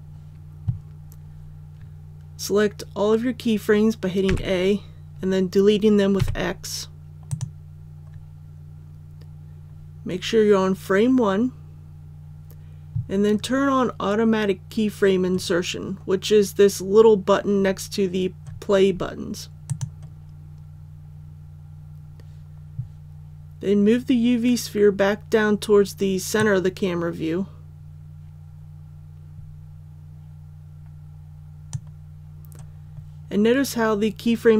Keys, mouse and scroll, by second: 4.2 a, 6.1 x, 7.2-32.0 drag.